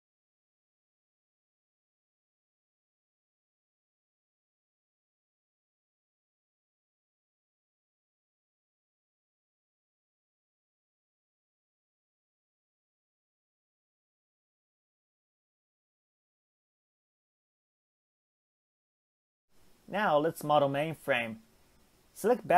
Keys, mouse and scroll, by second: 2.3 Tab, 2.9 alt+z, 3.6 click, 4.2 alt+z, 4.4 middle click, 5.2 g, 9.7-12.5 middle drag, 12.5 click, 13.7 g, 15.1 Tab, 15.2 scroll down 3, 15.4-17.2 middle drag, 17.2-17.6 scroll up 1, 17.6-18.0 shift+middle drag, 18.0 click, 18.6 Tab, 19.9 Tab, 20.9 click, 21.7 ctrl+click, 22.4 shift+click.